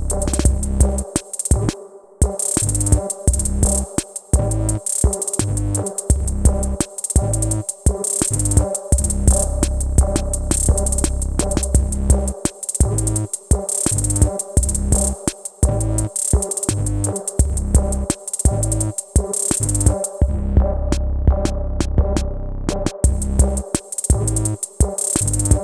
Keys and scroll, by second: 11.5 BackSpace, 12.1 BackSpace, 23.5 Up.